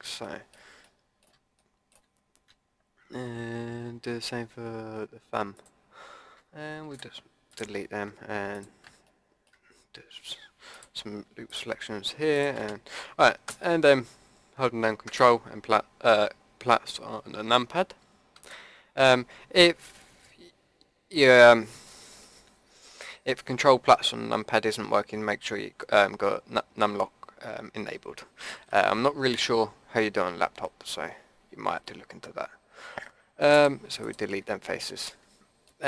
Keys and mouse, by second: 0.2 middle click, 0.4 click, 5.5-6.9 drag, 6.9 Delete, 9.0-13.4 drag, 13.4 ctrl+KP_Add, 18.3 Delete, 33.5 Delete, 34.4-35.7 drag.